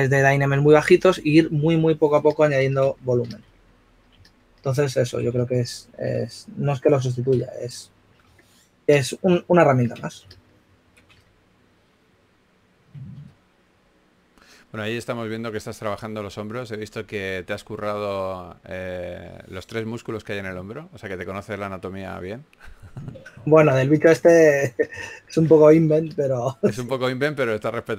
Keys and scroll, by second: 3.3 s, 5.1-6.6 typing, 11.1-13.6 typing, 15.7 typing, 18.8 typing, 21.8 typing, 23.1 typing, 26.4 shift+s.